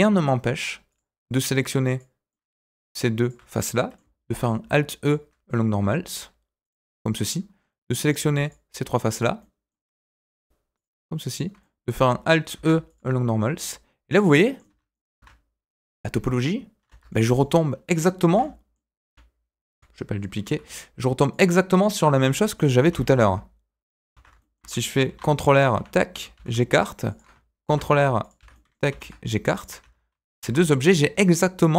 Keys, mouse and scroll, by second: 0.8 click, 1.8 click, 2.3 middle click, 3.2 shift+click, 3.7 middle click, 4.2 alt+e, 6.8 middle click, 8.0 click, 8.4 shift+click, 9.1 shift+click, 9.3 middle click, 10.1 shift+click, 10.7 shift+click, 11.2 shift+click, 11.6 middle click, 12.5 alt+e, 14.3 middle click, 14.6 Tab, 14.9 middle click, 15.1 Tab, 16.8 Tab, 17.0 middle click, 18.2 shift+d, 19.7 Delete, 20.4 shift+a, 22.0 g, 22.8 s, 24.1 Tab, 24.3 shift+middle click, 25.0 ctrl+r, 26.3 s, 27.6 ctrl+r, 28.5 middle click, 28.9 s, 29.8 Tab, 30.2 shift+click, 30.4 Tab, 30.6 middle click.